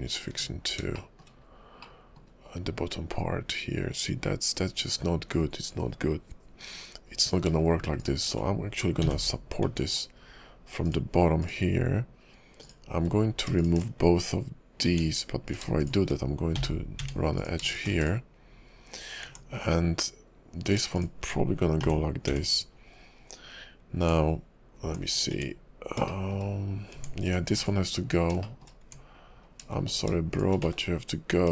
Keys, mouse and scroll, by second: 0.3 Tab, 0.9 shift+middle click, 1.4-1.8 scroll up 2, 1.8 middle click, 7.2 click, 8.0 shift+click, 9.2 j, 9.6 Tab, 10.8 click, 11.4 click, 12.6 click, 13.6 shift+click, 13.6 shift+click, 14.9 Tab, 15.5 click, 15.8 shift+click, 16.7 j, 17.0 Tab, 17.4 click, 17.7 shift+click, 17.9 x, 19.3 Tab, 20.6 click, 20.9 shift+click, 21.9 j, 22.3 Tab, 23.9 Tab, 24.0 Tab, 24.8 Tab, 25.3 Tab, 26.1 shift+middle click, 26.9 Tab, 27.3 click, 27.5 x, 28.4 shift+middle click, 28.8 Tab, 29.9 click, 30.3 shift+click, 30.9 1.